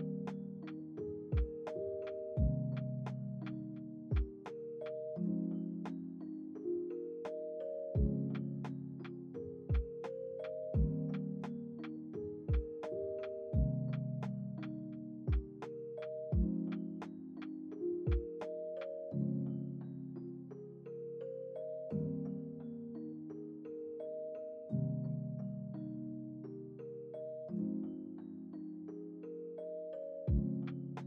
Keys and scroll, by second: 5.1 =, 13.5 ctrl+s, 14.0 v, 20.3 Return, 21.1 ctrl+s, 23.5 ctrl+c, 23.7 ctrl+v, 24.1 ctrl+s, 26.3 F9, 27.2 ctrl+z, 28.8 F9, 30.7 F9.